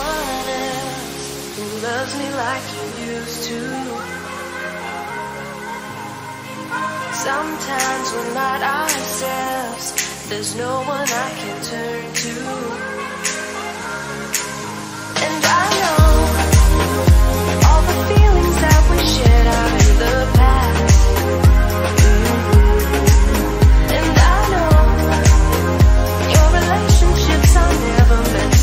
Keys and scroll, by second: 0.2 ctrl+z, 1.2 ctrl+alt+z, 6.8 ctrl+d, 24.3 ctrl++.